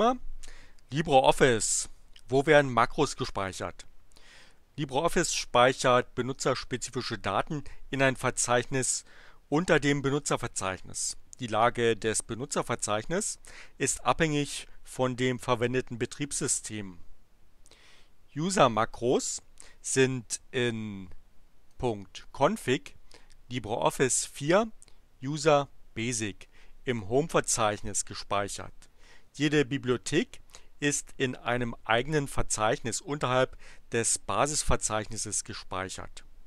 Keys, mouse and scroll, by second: 18.8 click, 21.7 click, 22.1-26.4 drag, 26.7 click.